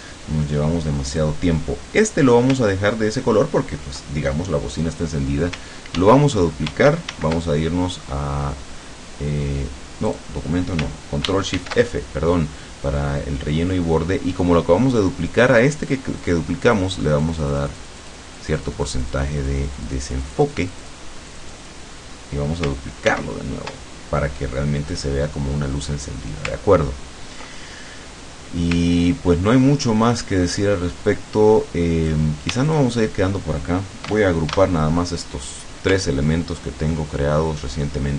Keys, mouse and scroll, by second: 1.2 click, 2.9-3.5 ctrl+scroll up 2, 6.0 ctrl+d, 7.1 ctrl+shift+d, 10.1 click, 11.6 ctrl+shift+f, 16.3 click, 16.7 click, 18.5-21.1 drag, 21.3 click, 23.1 ctrl+d, 24.9 click, 26.7-27.1 ctrl+scroll down 2, 27.2 ctrl+scroll down 2, 27.6 ctrl+click, 28.9-29.5 ctrl+scroll up 2, 29.7 ctrl+click, 29.7 ctrl+middle click, 31.1-32.3 drag, 32.7 shift+click, 34.5 ctrl+shift+g, 36.1-36.8 ctrl+scroll down 2, 37.1-38.1 ctrl+drag.